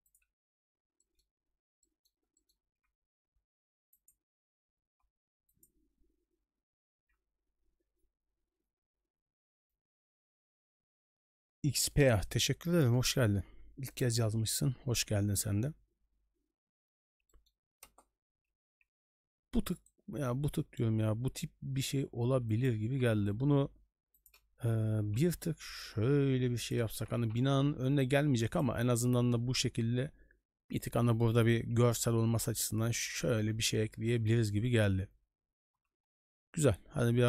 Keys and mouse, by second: 1.1 middle click, 1.8 middle drag, 2.4 middle drag, 4.9 g, 13.9 shift+middle drag, 17.3 middle click, 17.8 KP_0, 18.6 a, 22.3 g, 22.9 g, 31.6 a, 32.7 shift+middle drag, 34.2 shift+middle drag.